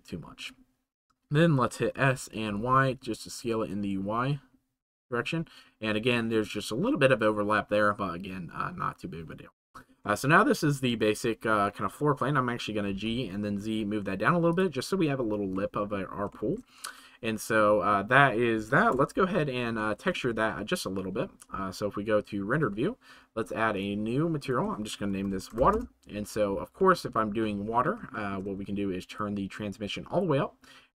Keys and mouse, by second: 4.8-5.9 drag, 6.2 shift+middle click, 10.1-10.9 middle drag, 14.5 click, 15.6 middle click, 16.4 shift+middle click, 17.6 middle click, 19.8 shift+middle click, 23.7 click, 24.4-25.8 shift+drag, 26.8 middle click, 28.1 shift+middle click, 29.0 click, 29.7 click.